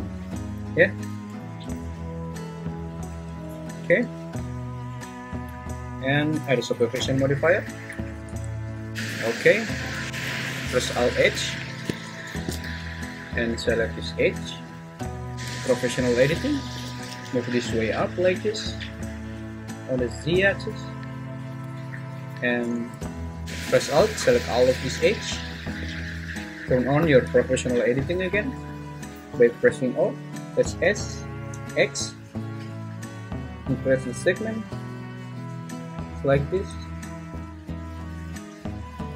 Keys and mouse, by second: 0.4 `, 1.1 Tab, 3.1 `, 3.8 `, 8.2 Tab, 10.1 ctrl+h, 11.2 alt+h, 12.6 `, 13.8-14.8 drag, 15.3 o, 16.7 g, 17.1 z, 20.3 click, 22.0 `, 24.6 alt+click, 25.8 `, 27.0 o, 30.7 s, 31.5 x.